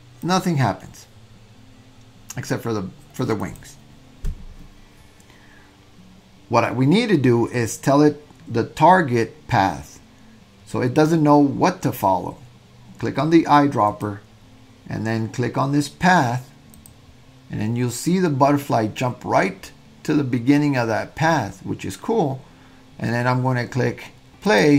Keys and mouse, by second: 0.2 click, 3.4 click, 24.5 click.